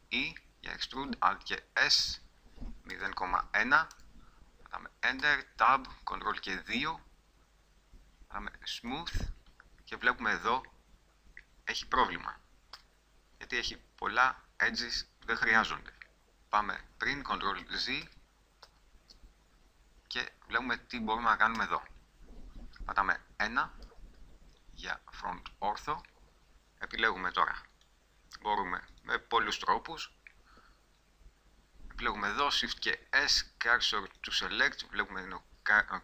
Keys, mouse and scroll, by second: 1.1 alt+s, 5.4 Tab, 6.5 ctrl+2, 9.1 click, 10.4 middle click, 12.9 Tab, 16.1 middle click, 16.5 Tab, 16.8 ctrl+z, 17.8 ctrl+z, 18.2 ctrl+z, 18.9 ctrl+z, 20.4 middle click, 21.7 a, 23.1 KP_1, 27.9-32.6 middle drag, 32.6 shift+s.